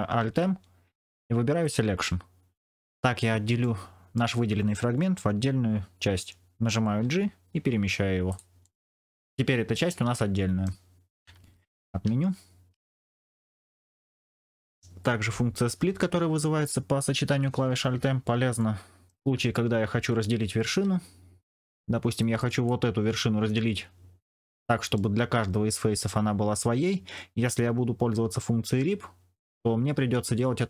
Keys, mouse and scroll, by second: 0.1 alt+m, 2.7 middle click, 3.5 middle click, 6.9 g, 8.5-10.6 middle drag, 11.3 ctrl+z, 11.8 ctrl+z, 12.7 ctrl+z, 14.2 middle click, 18.5 middle click, 20.6 1, 22.3 click, 24.5 shift+middle click, 29.5 v.